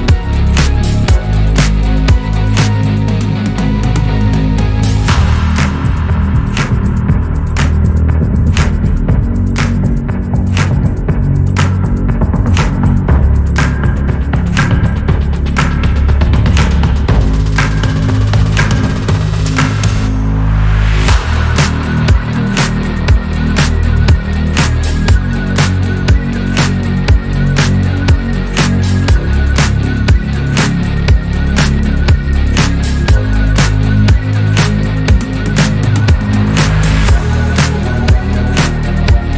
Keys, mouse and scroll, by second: 0.6 click, 0.8 scroll down 2, 1.3 alt+z, 1.6 click, 2.6 shift+s, 3.7-4.1 shift+middle drag, 4.1 click, 4.4 click, 5.3 shift+d, 7.6-8.7 drag, 8.7 r, 12.0 drag, 12.2 scroll down 5, 13.0-15.0 shift+middle drag, 15.8 scroll up 5, 16.9-17.6 shift+middle drag, 17.6 click, 18.8 shift+d, 19.8 g, 24.4-24.9 shift+middle drag, 24.9 click, 25.3 click, 26.8 Delete, 27.3 click, 28.0-29.4 drag, 29.4-31.1 middle drag, 31.1 click, 31.5 scroll down 3, 33.3 KP_3, 34.1 click, 34.3 scroll up 3, 34.7-35.5 shift+middle drag, 35.5 g, 36.2-37.4 scroll down 2, 37.4 scroll up 2, 37.9-39.3 shift+middle drag.